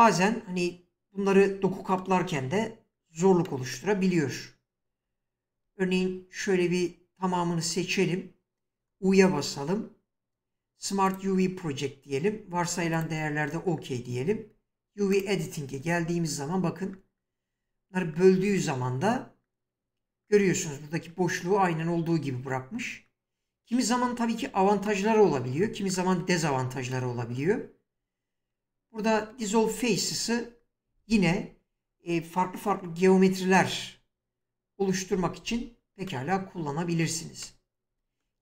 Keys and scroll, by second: 4.9 Tab, 5.8 a, 9.0 u, 35.1 typing.